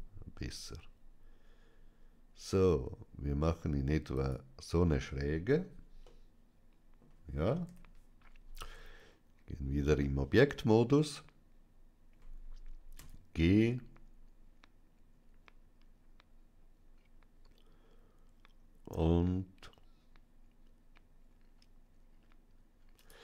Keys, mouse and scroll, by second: 4.0-5.9 drag, 5.9-7.5 middle drag, 7.5 KP_3, 8.5 Tab, 10.0-12.6 middle drag, 12.8 g, 22.8 click.